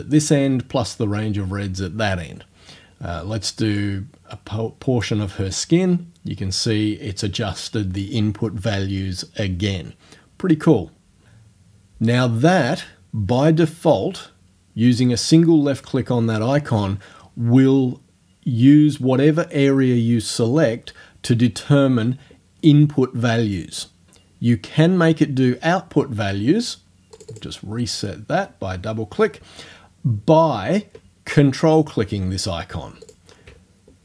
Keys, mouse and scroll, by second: 3.8-5.3 drag, 27.2 click, 33.1 ctrl+click.